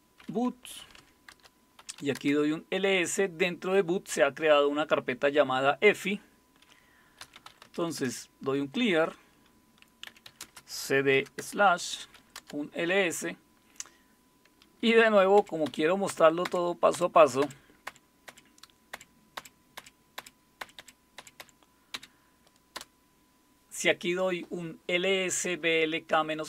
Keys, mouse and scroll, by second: 0.0-2.3 typing, 1.3 Return, 7.0-8.2 typing, 9.8-12.5 typing, 15.4 Up, 15.7 Up, 16.1 Up, 16.4 Up, 17.9 Up, 19.4 Up, 19.8-21.9 Up, 21.9 Down, 22.8 Return.